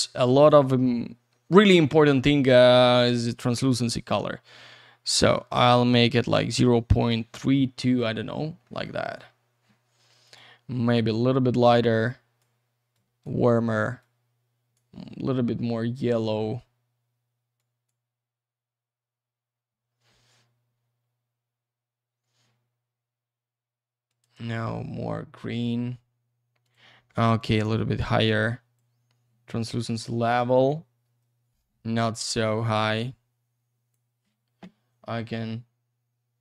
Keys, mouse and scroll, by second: 1.6 click, 3.6 click, 7.8 middle click, 8.2 scroll up 1, 8.6 middle click, 9.0-10.2 scroll down 1, 10.2 click, 12.1 click, 12.9 click, 14.0 click, 17.6 click, 20.5-21.7 scroll down 1, 24.1 click, 26.6 click, 27.4 click, 28.3 click, 29.7-31.0 scroll up 1, 31.3-32.5 scroll down 1, 32.8 click, 35.1-36.3 scroll down 1.